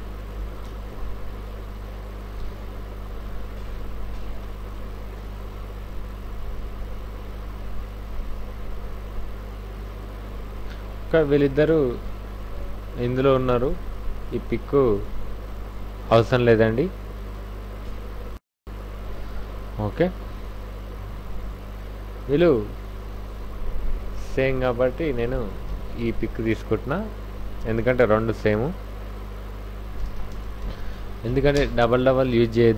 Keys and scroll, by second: 0.4 w, 0.8 v, 1.1 v, 2.4 alt+Tab, 6.0 Right, 7.2 Left, 10.0 Right, 10.7 Left, 12.4 Right, 21.5 alt+Tab, 30.0 alt+i, 30.1-30.9 typing, 30.3 Return, 31.5 Return, 32.0 f.